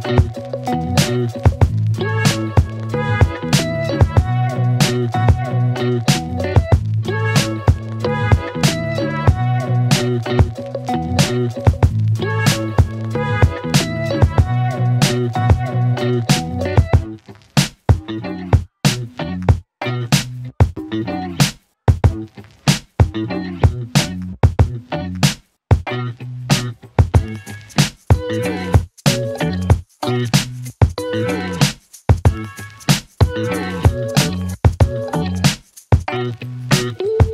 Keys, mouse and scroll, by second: 0.5 space, 2.2 click, 4.9 click, 6.2 ctrl+c, 8.0 click, 8.9-9.4 scroll up 1, 9.4-10.7 middle click, 11.4 ctrl+v, 13.0-15.6 click, 17.0 Return, 18.1 click, 18.7 Return, 20.8 Return, 22.2 click, 22.9 Return, 23.8 click, 24.5 Return, 25.5-26.4 click, 31.6 space, 33.5 space, 34.6 z, 34.8-36.1 click.